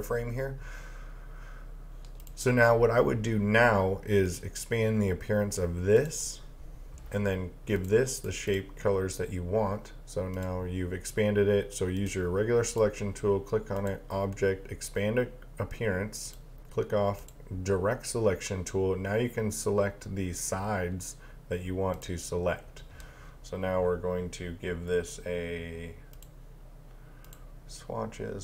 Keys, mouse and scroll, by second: 2.2 click, 22.0 click, 26.1 click.